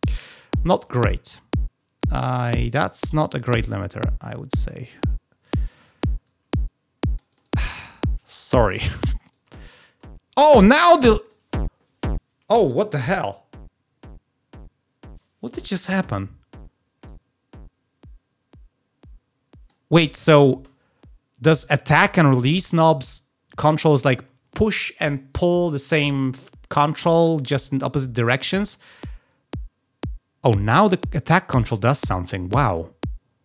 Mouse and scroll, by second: 0.9-5.6 drag, 6.4 click, 7.2 click, 7.4 click, 9.2-10.3 drag, 17.0-19.6 drag, 28.2-31.9 drag.